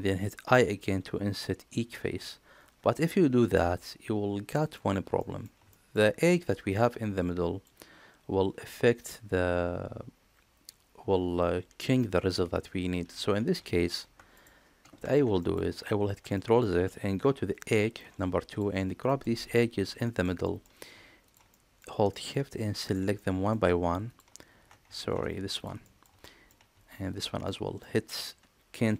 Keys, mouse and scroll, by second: 5.0 middle click, 5.5 shift+middle click, 15.2 ctrl+middle click, 15.5 ctrl+z, 16.1 middle click, 17.4 2, 18.3 click, 18.9 middle click, 19.6 shift+click, 19.8 middle click, 20.2 shift+middle click, 21.3 middle click, 21.9 shift+middle click, 23.0 middle click, 23.9 shift+click, 24.8 ctrl+z, 25.6 middle click, 26.0 shift+middle click, 26.9 shift+click, 27.3 middle click.